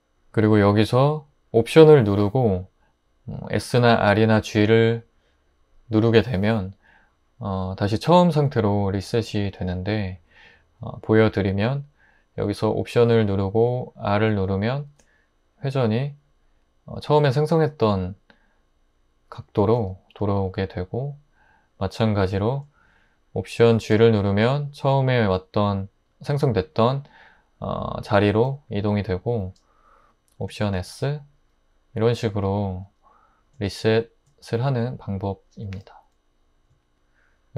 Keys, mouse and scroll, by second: 14.9 alt+r, 19.8 click, 23.8 alt+g, 30.8 alt+s.